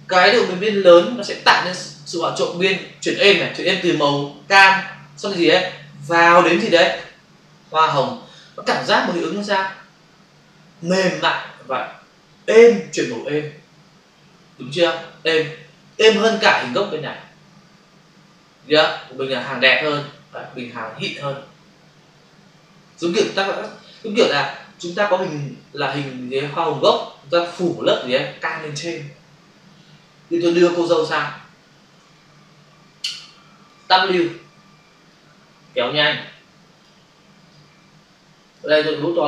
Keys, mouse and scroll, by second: 15.9 click, 19.3 click, 30.6 click, 32.1 ctrl+click, 34.4 w, 35.0 click, 37.4 click, 39.1 ].